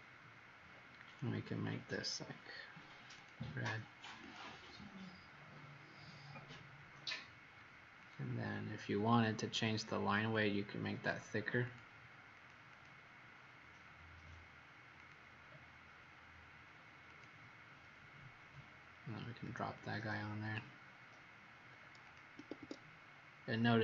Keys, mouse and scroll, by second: 1.0 click, 12.3 click, 12.7 click, 14.9 click, 22.3 Escape, 22.6 Escape, 23.4-23.8 scroll up 5.